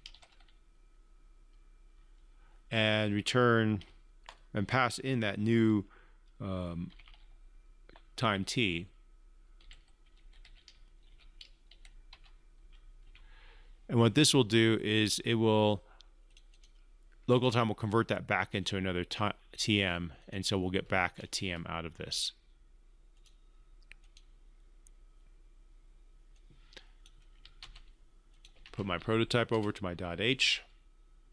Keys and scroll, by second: 28.1 ctrl+c, 29.1 ctrl+v.